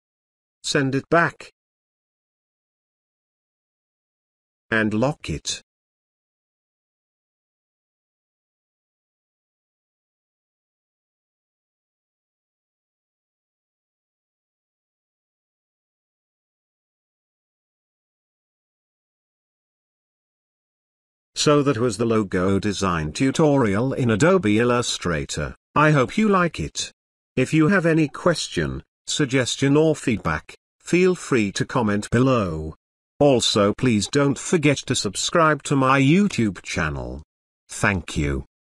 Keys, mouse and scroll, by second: 1.5 click, 2.7 click, 7.9 ctrl+space, 8.0-8.7 ctrl+click, 8.4 ctrl+space, 9.5-10.4 alt+shift+drag, 12.7 space, 13.2-14.6 ctrl+click, 13.6 ctrl+click, 14.5 ctrl+click, 15.0-15.3 click, 15.7-16.3 ctrl+click, 16.8-17.1 ctrl+click, 17.5-18.1 click, 20.1-20.7 alt+shift+click, 23.4 space, 23.9-24.5 ctrl+click, 24.9-25.2 click, 35.8 click.